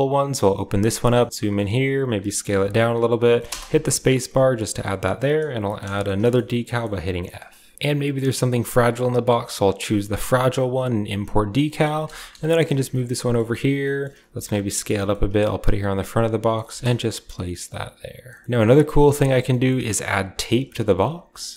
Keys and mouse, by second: 0.0-3.6 middle drag, 5.9-7.7 middle drag, 10.7-21.5 middle drag, 12.1 KP_1.